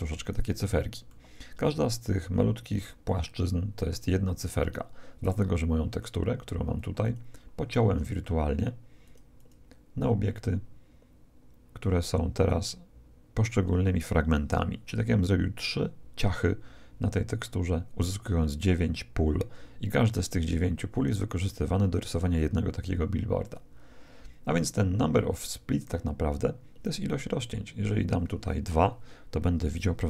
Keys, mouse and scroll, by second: 0.0 Escape, 1.1-2.7 middle drag, 3.1-4.8 middle drag, 6.7-8.7 drag, 7.6-9.8 middle drag, 9.0-11.1 drag, 23.4-25.1 drag, 28.0-29.8 drag.